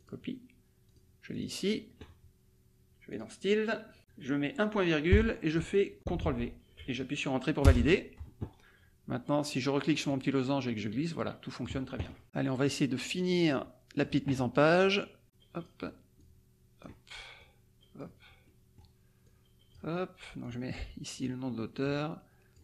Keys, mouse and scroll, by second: 0.0 click, 0.8 click, 1.3 click, 3.1 click, 5.1 ;, 6.1 ctrl+v, 7.7 Return, 10.1-11.8 drag, 13.1 click, 14.7 click, 15.2 click, 16.2 click, 17.4 click, 18.4 middle click, 19.2 click, 20.4 click, 21.7 click.